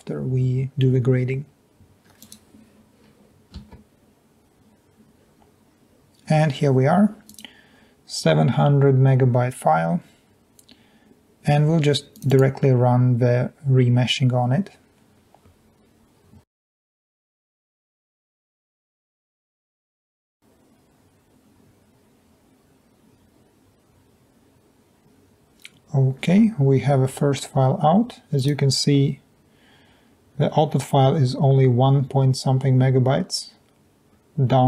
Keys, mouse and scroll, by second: 3.6 F5.